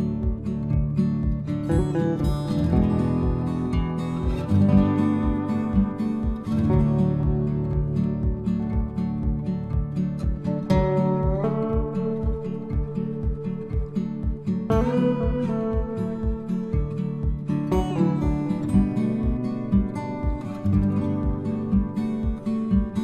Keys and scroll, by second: 21.1 ctrl+c, 22.4 ctrl+v.